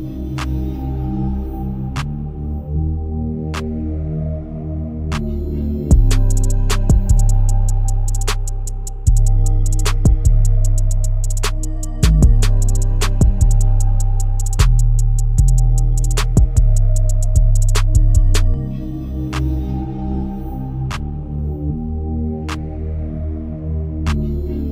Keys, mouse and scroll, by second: 0.0 r, 13.2 click, 15.4 KP_0, 20.0 g, 23.6-24.0 scroll up 1, 24.0 shift+middle click, 24.4-24.7 scroll up 2.